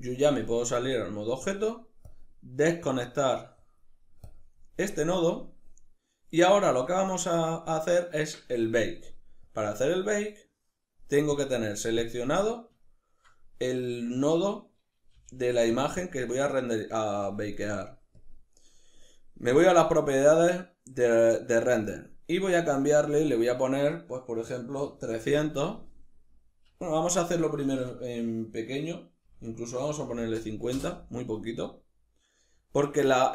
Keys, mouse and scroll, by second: 2.5 click, 3.2 click, 3.9 click, 9.1 click, 9.9-11.1 drag, 11.7 click, 12.5-15.5 ctrl+middle drag, 14.7 g, 15.5 click, 17.8 click, 22.8-33.3 drag, 24.9 0.